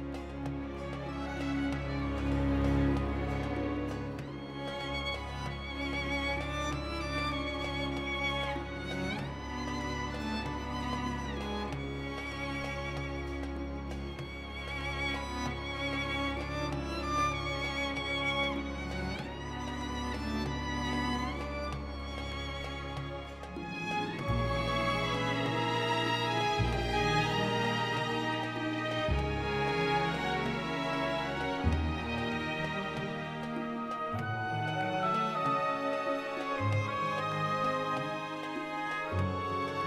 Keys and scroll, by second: 1.0 Tab, 1.2 g, 10.6 x, 12.0 shift+d, 12.3 x, 14.0 Escape, 18.3 Tab, 23.6 Tab, 25.1 shift+d, 25.2 x, 27.0 shift+r, 29.7 s, 30.7 g, 30.9 x, 35.2 ctrl+j, 38.0 shift+d, 38.4 y, 38.9 r, 39.6 Return.